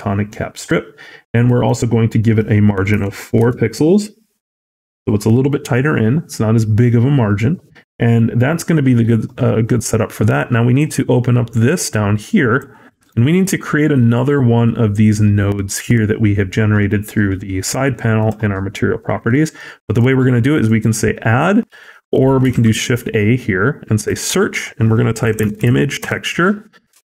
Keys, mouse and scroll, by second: 1.5 click, 10.7 click, 12.8 middle click, 19.0-19.4 scroll up 3, 19.4 middle click.